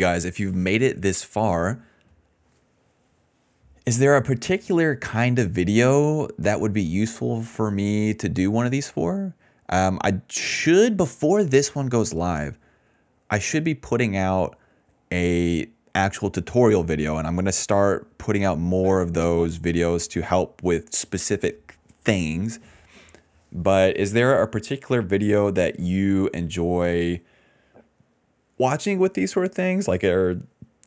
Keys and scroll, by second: 13.0 ctrl+z, 13.1 ctrl+z, 13.7 ctrl+z, 14.4 ctrl+z, 14.9 ctrl+z, 15.1 ctrl+z, 15.5 ctrl+z, 15.8 ctrl+z, 16.1 ctrl+z, 16.3 ctrl+z, 17.4 s, 18.5 ctrl+s, 18.7 space, 19.0 d, 19.4 space, 23.9 s, 27.5 s, 29.7 ctrl+z.